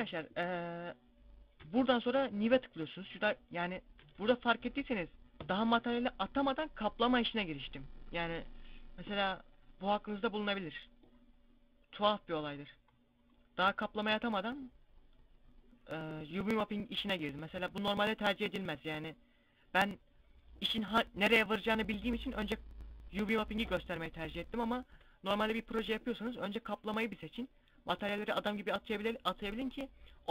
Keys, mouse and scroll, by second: 1.5 Tab, 3.9 Tab, 10.7 click, 12.5 scroll down 1, 13.5 Tab, 13.5 scroll down 4, 17.2 Tab.